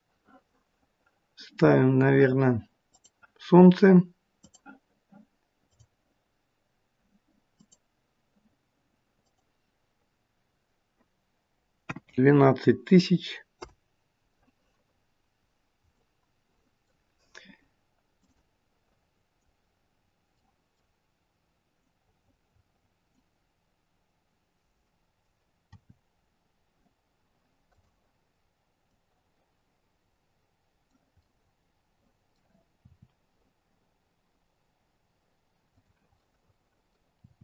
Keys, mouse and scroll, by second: 2.8 click, 4.6 click, 7.6 click, 9.1 click, 14.9 scroll down 1, 15.5-15.9 scroll down 3, 15.9 middle click, 18.1 click, 18.4 click, 19.8-20.2 scroll down 2, 20.2 middle click, 25.7 r, 31.2 middle click, 32.7 r, 36.0 middle click, 37.1 r.